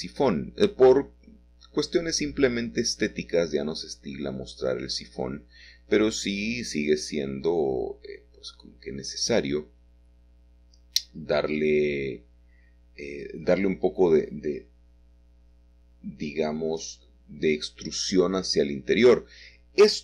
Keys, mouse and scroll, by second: 1.0 c, 1.4-2.6 drag, 3.5-5.4 middle drag, 5.4 c, 6.2-8.1 drag, 7.9 Escape, 8.1 middle click, 9.9 s, 10.3 shift+z, 11.6 Escape, 12.5 e, 13.6 s, 14.0 shift+z, 17.1 click, 17.6 click, 18.5-18.9 scroll up 2.